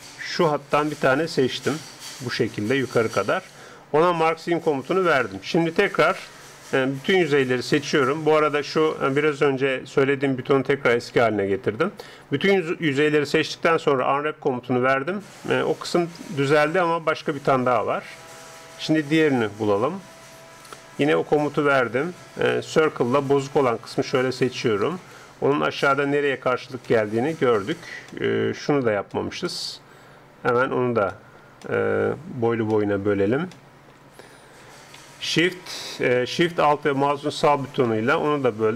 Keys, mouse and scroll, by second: 0.5-2.3 right drag, 1.3-3.1 middle drag, 4.5-6.3 drag, 5.7 ctrl+Up, 7.1 a, 7.5 a, 9.5-11.5 drag, 11.2 a, 11.6 a, 13.2 u, 16.0 middle click, 19.5 a, 21.1-22.8 drag, 22.6 c, 25.7-34.7 middle drag, 34.7 a, 37.0-38.0 right drag, 38.5 click.